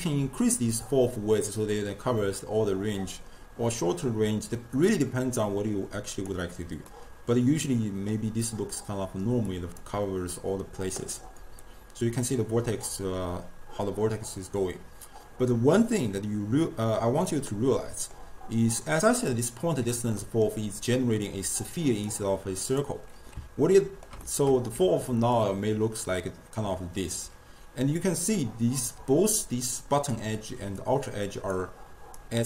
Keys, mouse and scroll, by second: 6.9-9.5 middle drag, 9.5-11.2 drag, 11.2-15.8 middle drag, 20.2-21.3 middle drag, 21.3 click, 22.6 click, 23.8-24.8 ctrl+middle drag, 24.8 d, 25.3 d, 25.4-27.1 drag, 27.1 d, 27.2 d, 29.0 d, 29.4 click, 30.2-30.8 d, 30.8 click, 31.6-32.2 d, 32.2-32.4 right drag.